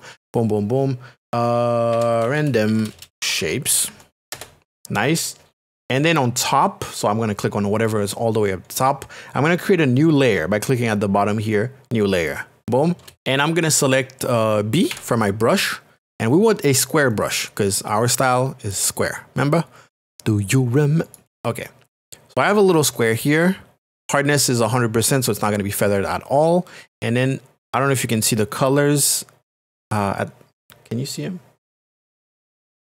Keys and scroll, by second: 1.7-4.4 typing, 13.0 space, 14.9 b.